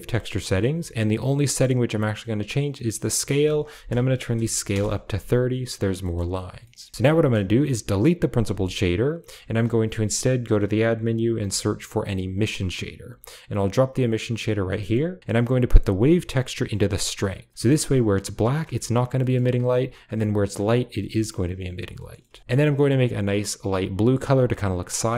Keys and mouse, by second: 3.1-4.6 drag, 5.9 middle click, 7.3 click, 8.4 typing, 9.4 shift+a, 16.0-16.9 drag, 17.2 click, 17.5 shift+middle click, 19.1 middle click, 19.9 click, 22.4 ctrl+v, 22.6 middle click, 24.4 middle click.